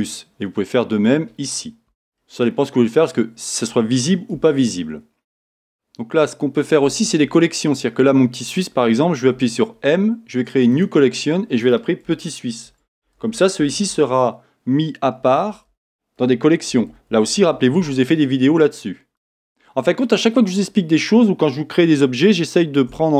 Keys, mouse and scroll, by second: 0.0-23.1 middle drag, 2.1 scroll, 2.2-2.5 scroll down 2, 3.1 scroll up 1, 3.3 scroll down 1, 4.3 Tab, 4.7-5.0 scroll down 1, 9.3 m, 17.2 s.